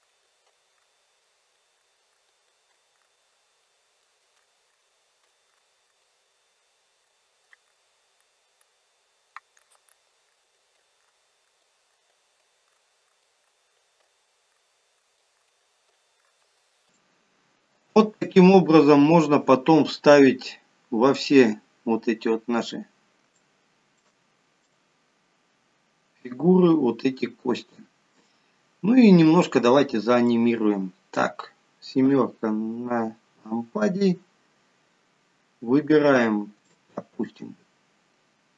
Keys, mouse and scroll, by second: 0.1 shift+click, 0.6 ctrl+p, 1.3 shift+middle click, 1.9 click, 2.2 shift+click, 2.8 ctrl+p, 3.3 middle click, 3.9 scroll down 5, 4.1 shift+middle click, 4.5 click, 4.8 shift+click, 5.3 ctrl+p, 6.0 click, 6.4 middle click, 7.1 click, 7.9 click, 8.3 click, 9.7 click, 10.0 click, 10.4 shift+click, 10.9 ctrl+p, 11.5 click, 12.0 shift+click, 12.5 ctrl+p, 13.2 click, 13.5 shift+click, 14.1 ctrl+p, 15.1 click, 15.5 shift+click, 16.0 ctrl+p, 16.6-17.1 scroll down 10, 17.3 middle click, 21.7 click, 22.5 scroll up 4, 23.7 shift+middle click, 25.0 middle click, 28.9 scroll down 2, 30.6 middle click, 32.4 KP_7, 33.6 scroll down 2, 36.3 scroll up 3, 37.0 shift+middle click, 37.9-38.5 scroll up 2.